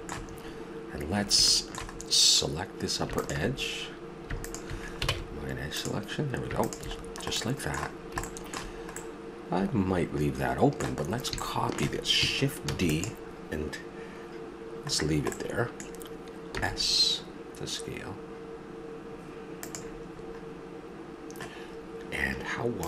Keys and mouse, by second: 3.2 right click, 5.1 ctrl+Tab, 7.9-9.2 middle drag, 9.9 middle click, 11.1 middle click, 12.7 shift+d, 16.5 s, 19.2 click, 20.1-22.5 middle drag.